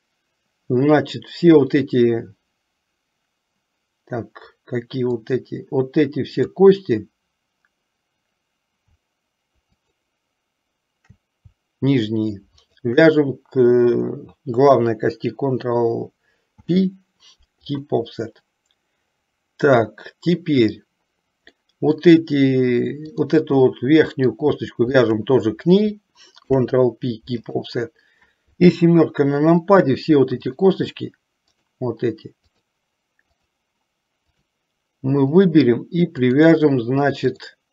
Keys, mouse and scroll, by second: 5.2-6.8 drag, 9.9 shift+click, 12.7 shift+click, 16.7 ctrl+p, 21.8 middle click, 23.2 click, 23.8 middle click, 25.0 shift+click, 26.5 ctrl+p, 28.8 KP_7, 30.7 click, 31.8 shift+click, 32.5 shift+click, 33.4 shift+click, 35.4 shift+click, 36.3 shift+click, 37.4 shift+click.